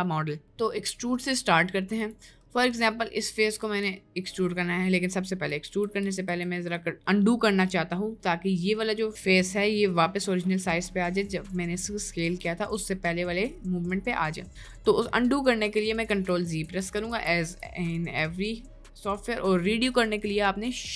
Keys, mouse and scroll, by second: 0.5 Tab, 2.5 middle click, 3.8 ctrl+z, 5.7 ctrl+z, 6.0 ctrl+z, 6.3 ctrl+z, 9.1 middle click, 9.5 Tab, 10.1 middle click, 10.5 Tab, 11.1 middle click, 16.1 ctrl+z, 16.5 ctrl+z, 16.8 ctrl+z, 17.1 ctrl+z, 17.4 ctrl+z, 19.2 middle click, 19.9 middle click.